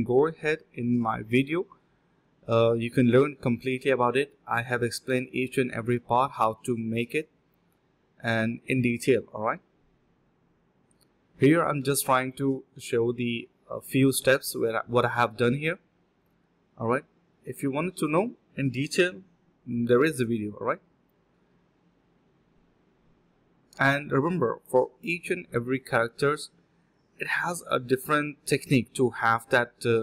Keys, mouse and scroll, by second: 3.5 alt+click, 4.1 double click, 5.1 alt+click, 5.5 double click, 5.7 alt+click, 5.8 alt+click, 6.4 double click, 13.7 shift+click, 14.9 shift+click, 15.3 alt+click, 15.6 alt+click, 15.8 alt+click, 16.0 alt+click, 16.1 alt+click, 16.4 typing, 16.8 double click, 18.9 shift+click, 19.2 shift+space, 19.5 shift+click, 20.2 shift+click, 20.7 alt+click, 20.9 alt+click, 21.0 alt+double click, 21.6 alt+click, 21.8 alt+click, 22.3 alt+click, 22.4 alt+click, 22.6 alt+click, 23.0 typing, 23.6 alt+click, 24.2 alt+click, 25.6 1, 25.9 double click, 27.9 double click.